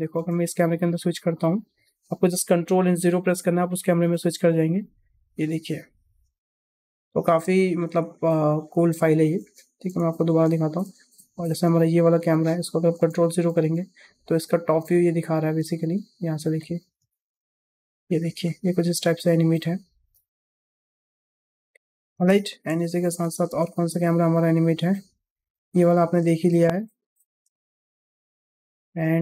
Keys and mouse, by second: 0.0 space, 0.6 click, 1.3 click, 2.8 ctrl+KP_0, 3.9 space, 9.3 space, 9.9 KP_0, 10.7 space, 11.4 space, 11.9 click, 13.0 ctrl+KP_0, 13.5 space, 15.5 space, 16.5 click, 16.9 space, 18.3-18.9 shift+middle drag, 22.1 space, 22.6 KP_0, 23.3 space, 26.1 space, 27.0 click, 27.4 space, 28.8 space.